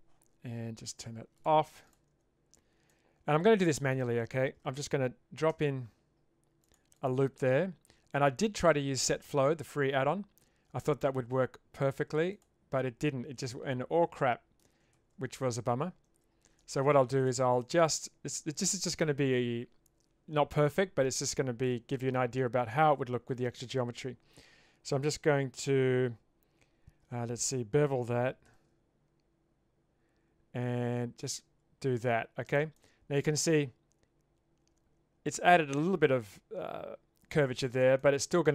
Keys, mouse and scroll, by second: 1.4 click, 2.1 Tab, 2.9 middle click, 5.5 ctrl+r, 8.5-12.4 right drag, 13.1-14.6 middle drag, 15.0 ctrl+z, 15.4 middle click, 16.1 ctrl+z, 17.7 middle click, 21.6 middle click, 28.5 ctrl+b, 32.8-35.3 middle drag, 38.0 middle click.